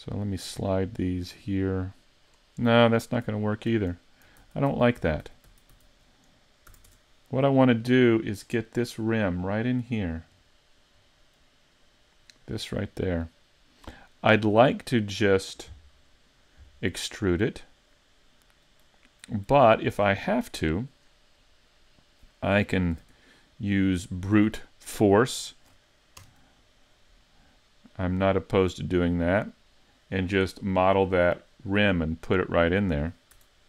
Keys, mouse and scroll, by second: 3.3 super+z, 3.7 super+z, 4.4-6.7 typing, 6.9 Tab, 7.3 middle click, 8.5-8.9 scroll up 4, 9.0 middle click, 10.0 scroll down 2, 10.4 middle click, 11.1 middle click, 12.9 middle click, 17.0 middle click, 21.4 middle click, 23.0 shift+c, 23.8-24.3 scroll up 5, 24.3 middle click, 25.4 shift+middle click, 26.2 KP_Decimal, 27.9 middle click, 32.2 middle click, 33.4 Tab.